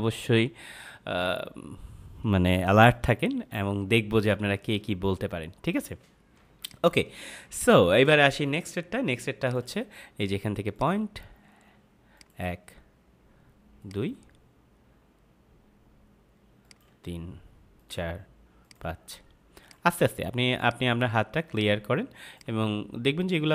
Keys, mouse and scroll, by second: 6.3 space, 6.5 click, 6.8 space, 7.5 click, 9.3 click, 16.6 click.